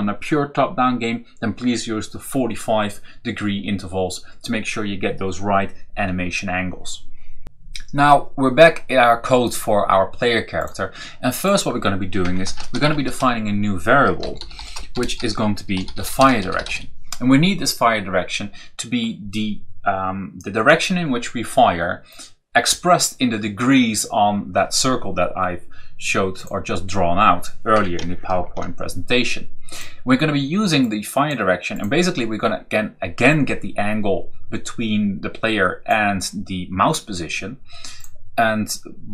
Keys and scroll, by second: 12.0 Return, 12.1-17.0 typing, 27.6 Return, 28.2 ctrl+v.